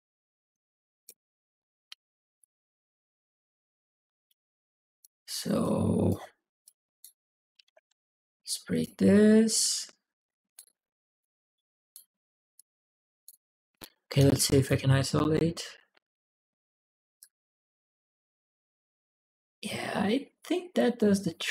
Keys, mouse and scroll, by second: 2.2-4.8 drag, 5.4 click, 6.4 click, 7.1-8.2 typing, 8.5 click, 10.0 click, 11.0 click, 12.3 click, 14.0 click, 17.0-21.5 drag.